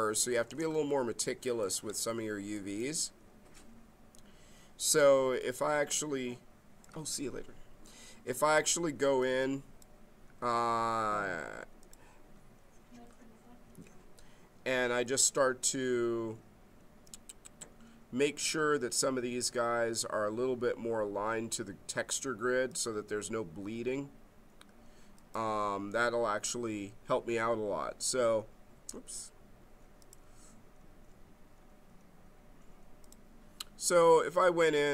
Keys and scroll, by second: 0.4 space.